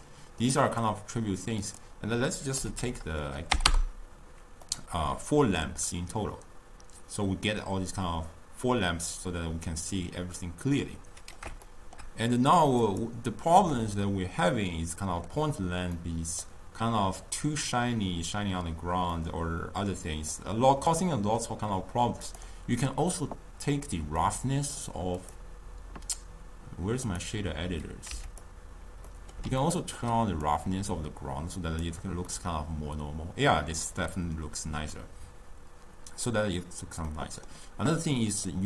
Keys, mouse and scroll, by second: 1.7-4.7 drag, 4.8-7.8 middle drag, 11.7-12.9 shift+middle drag, 12.9 click, 13.7-19.1 middle drag, 19.2-22.3 middle drag, 22.3 click, 24.3-28.2 drag, 28.2 q, 29.2-30.5 middle drag, 30.5-32.4 drag, 32.4-35.4 middle drag, 37.2-38.6 middle drag.